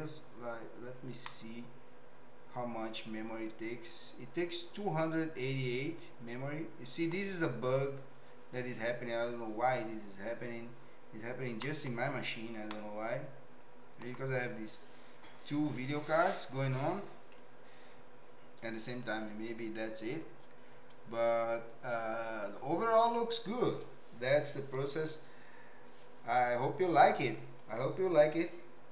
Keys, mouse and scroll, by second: 1.4-7.1 middle drag, 11.6 middle click, 12.7-14.0 middle drag.